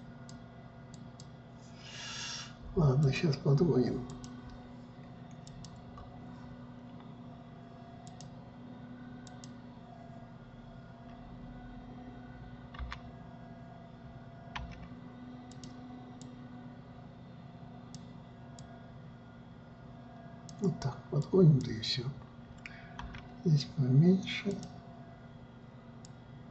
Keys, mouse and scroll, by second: 0.5 click, 1.5 click, 3.6-4.8 drag, 6.0 click, 8.6-11.7 drag, 13.4 g, 15.1 f, 16.8-23.6 drag, 23.6 f.